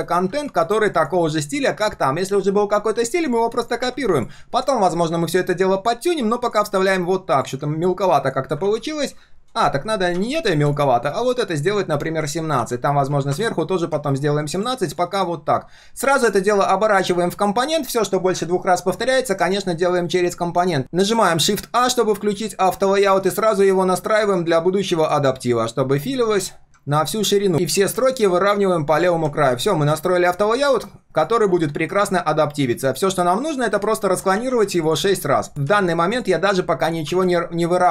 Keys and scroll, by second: 0.0 ctrl+alt+c, 1.3 ctrl+alt+v, 12.5 ctrl+a, 32.1 ctrl+z, 34.4 ctrl+d, 35.5 ctrl+z.